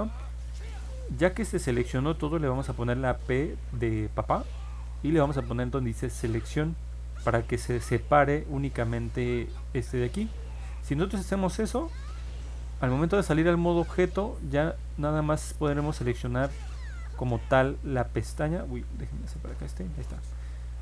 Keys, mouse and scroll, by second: 9.2 click, 11.8 ctrl+Tab, 13.6 middle click, 14.7 click, 15.3 click, 16.7 alt+z, 17.5 click, 18.8 ctrl+z, 19.4 click, 20.5 click.